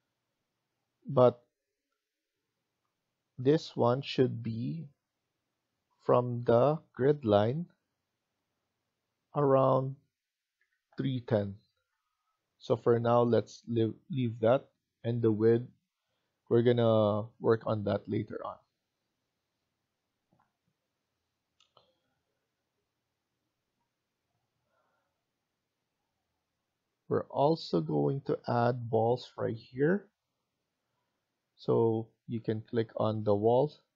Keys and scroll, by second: 1.1 Escape, 1.3 Escape, 10.2-11.7 typing, 12.5 Escape, 12.9 Escape, 17.6-18.3 typing.